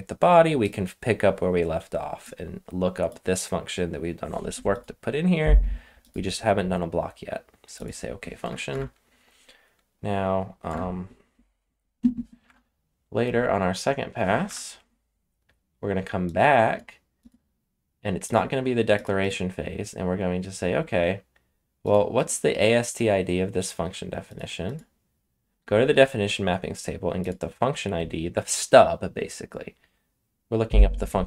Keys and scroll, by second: 8.4 BackSpace, 8.6 BackSpace, 10.6 BackSpace, 12.4 BackSpace, 14.4 BackSpace.